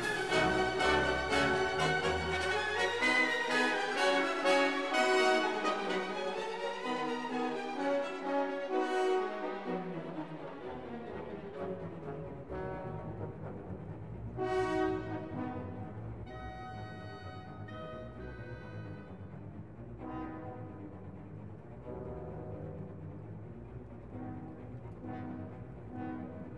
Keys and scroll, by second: 13.7 z, 13.8 f, 17.3 2, 17.4 ., 17.5 6, 17.6 Return.